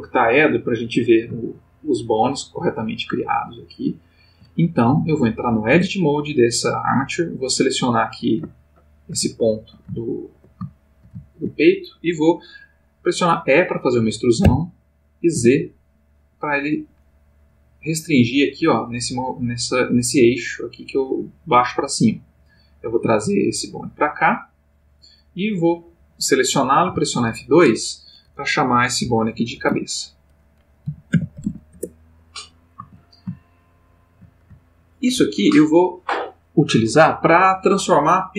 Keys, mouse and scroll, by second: 0.6 click, 1.4 ctrl+middle click, 2.5-4.5 ctrl+middle drag, 5.7 Tab, 6.6 click, 7.6 click, 8.5-10.4 ctrl+middle drag, 10.6-11.7 ctrl+shift+middle drag, 14.4 e, 15.3 z, 24.7 click, 26.0 click, 26.9 F2, 29.5 shift+c, 29.7 shift+a, 30.9 b, 31.1 e, 31.4 c, 31.5 a, 31.8 Return, 33.6 shift+middle click, 34.7 ctrl+shift+middle click.